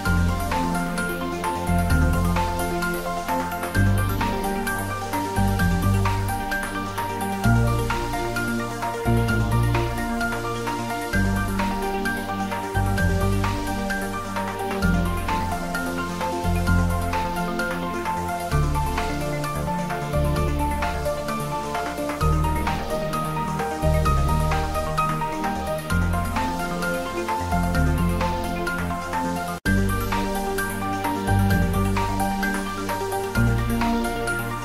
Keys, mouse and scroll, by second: 0.4 middle click, 1.2 click, 1.8 ctrl+s, 2.3-3.8 middle drag, 3.8 click, 4.3 Tab, 4.9 a, 6.6 middle click, 7.9 alt+e, 8.5 click, 11.8 click, 11.9 Tab, 12.2-14.4 middle drag, 14.4 click, 14.7-17.8 ctrl+middle drag, 17.8 click, 19.7 shift+z, 21.1 g, 21.3 Right, 24.0 click, 24.2 ctrl+z, 24.6 s, 25.8 click, 26.2 ctrl+s, 27.5-29.4 typing, 27.8-28.3 shift+middle drag, 29.5-30.5 middle drag, 30.8-33.2 typing, 31.9 click, 33.1 click, 34.0 click, 34.3-34.6 middle drag.